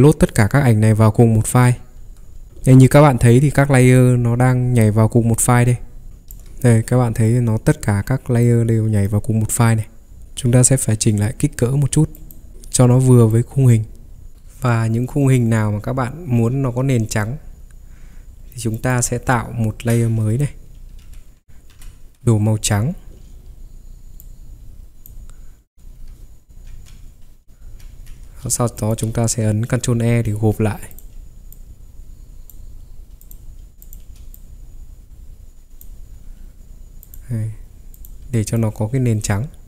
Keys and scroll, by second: 2.0 Escape, 6.1 ctrl+3, 6.1 v, 10.1 Escape, 12.5 ctrl+t, 21.0 x, 21.7 alt+Delete, 26.9 ctrl+j, 27.6 ctrl+j, 27.9 ctrl+j, 30.1 ctrl+e.